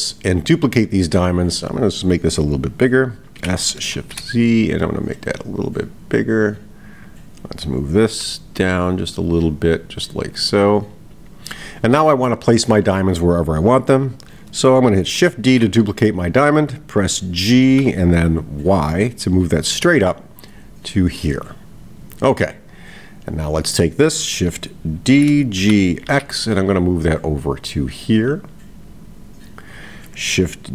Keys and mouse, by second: 1.6 click.